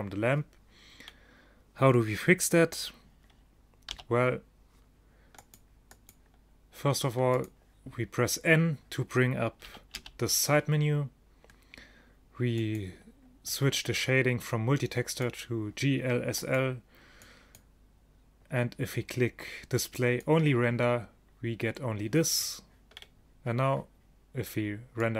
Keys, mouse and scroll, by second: 4.0 n, 5.5-9.2 drag, 9.8 n, 10.0 n, 23.0-25.1 drag.